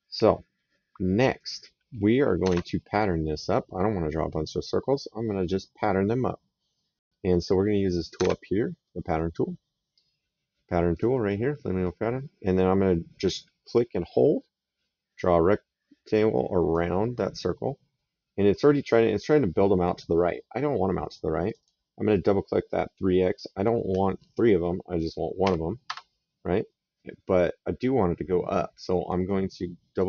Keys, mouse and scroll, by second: 2.3 alt+Tab, 8.1 alt+Tab, 10.7 click, 13.8 click, 21.2 click, 25.1 KP_1, 25.6 Return, 29.7 click.